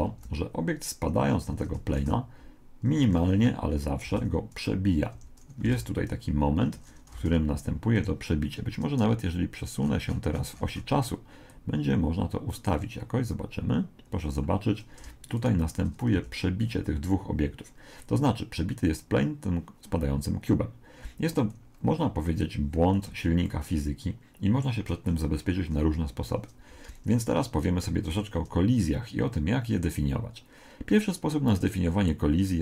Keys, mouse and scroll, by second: 0.1 alt+a, 1.3 Escape, 2.0 alt+a, 2.9 Escape, 3.3-4.5 middle drag, 4.1 alt+a, 5.1 Escape, 5.7 alt+a, 6.6 Escape, 7.2 alt+a, 8.0 Escape, 9.8-11.8 middle drag, 11.5 click, 15.4 right click, 16.1 z, 16.6-18.7 middle drag, 20.9-25.3 middle drag, 26.7 Escape, 27.9 z.